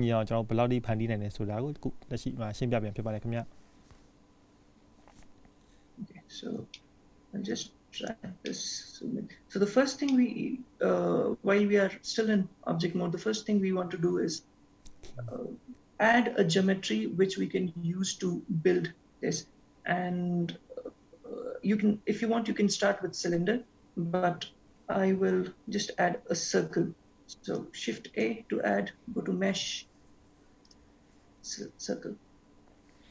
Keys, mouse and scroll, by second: 6.8 shift+middle click, 8.7 scroll up 4, 9.2 shift+middle click, 10.6 shift+middle click, 28.0 shift+a.